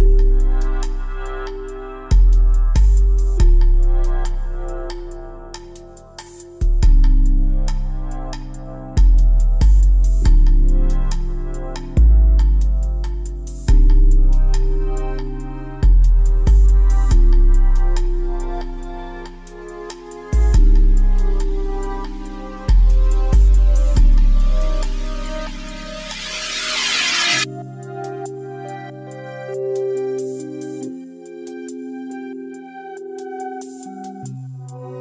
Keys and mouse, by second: 4.7 z, 5.4 z, 5.7 a, 8.4 middle click, 8.6 g, 14.5 g, 31.2 a.